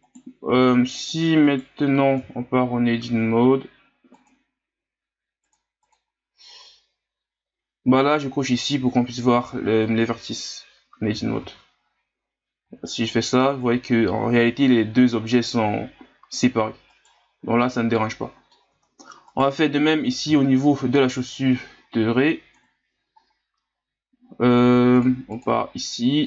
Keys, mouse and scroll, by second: 0.0 right click, 0.4 Tab, 1.0 right click, 1.4 right click, 2.2 Tab, 4.1 click, 5.4 click, 5.8 click, 11.1 a, 11.4 a, 12.6 g, 17.6-18.7 middle drag, 18.7 Tab, 19.3 right click, 19.8 scroll down 2, 20.4 scroll up 1, 21.0 scroll down 1, 22.6 KP_1, 23.2 scroll up 4, 25.0-26.2 drag.